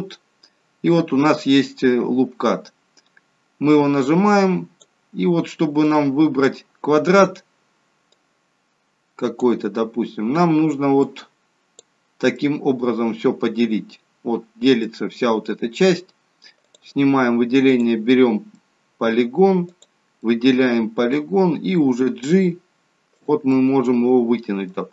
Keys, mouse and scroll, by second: 3.9 click, 5.9 click, 11.1 click, 12.5 middle click, 15.0 middle click, 16.7 click, 17.8 click, 18.6 middle click, 19.8 click, 20.3 middle click, 22.1 g, 23.6 middle click, 24.8 g.